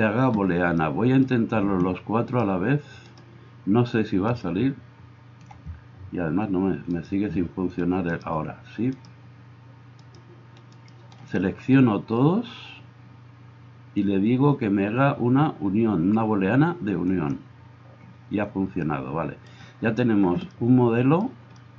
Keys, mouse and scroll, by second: 2.3 right click, 3.0 middle click, 3.1-4.5 right drag, 4.5-7.0 middle drag, 7.0 right click, 7.3-21.6 shift+middle drag, 21.6-21.7 drag.